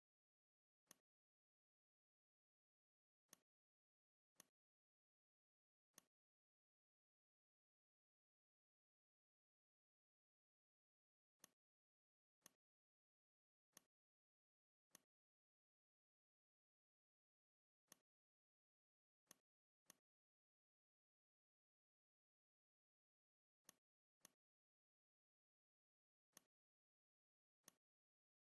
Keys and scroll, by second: 7.9 ctrl+], 18.7 a, 25.9 v.